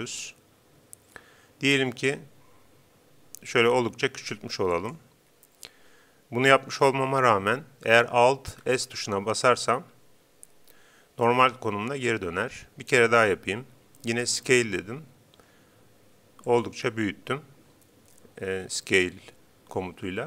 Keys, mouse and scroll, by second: 4.9-6.6 drag, 8.8 alt+s, 14.3 s, 16.6-18.2 drag.